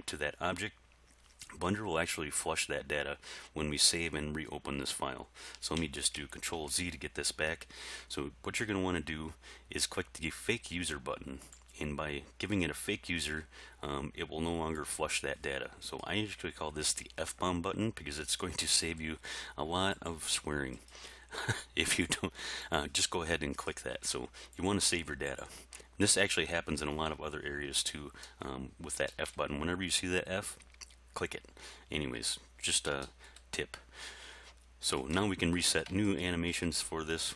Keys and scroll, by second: 6.1 ctrl+z.